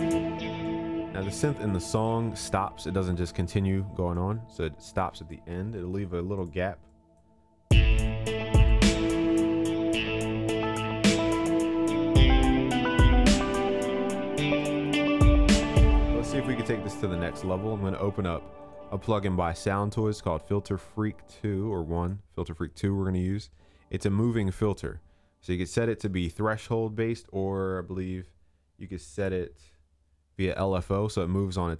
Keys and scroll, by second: 0.5 ctrl+s, 5.6 ctrl+z, 15.1 ctrl+s.